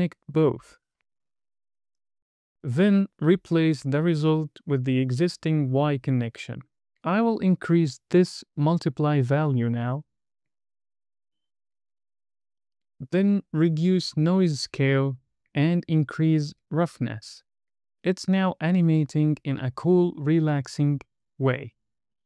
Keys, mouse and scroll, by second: 0.4 middle click, 1.3 drag, 2.6 middle click, 4.0 drag, 6.7 middle click, 7.7 space, 8.4 space, 8.6 middle click, 8.8-9.3 scroll up 5, 9.3-11.1 drag, 12.4-13.8 drag, 15.1-17.4 drag, 17.8 scroll down 2, 17.8 space.